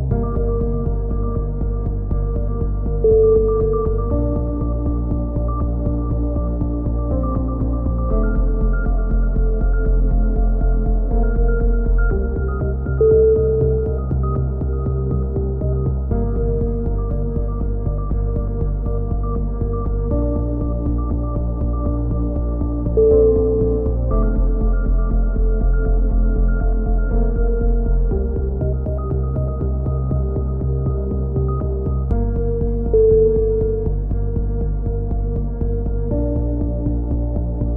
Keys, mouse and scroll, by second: 0.9 click, 2.1 KP_3, 2.7 e, 3.3 click, 5.3 click, 5.4 z, 5.9 c, 6.4 right click, 6.9 click, 8.1 z, 8.4 a, 8.6 Tab, 9.0 middle click, 11.6 middle click, 11.9-13.3 drag, 13.3-15.8 middle drag, 15.8 scroll down 1, 16.1-17.1 drag, 17.5-19.1 middle drag, 18.5 KP_3, 20.1 middle click, 20.4 middle click, 20.5 z, 20.9-22.6 drag, 22.6 middle click, 23.2 Tab, 24.0 c, 27.2-28.4 middle drag, 27.8 e, 28.4 click, 30.1 click, 30.5 middle click, 30.8 s, 33.0-35.4 drag, 35.9 e, 37.1 e, 37.6 ctrl+z.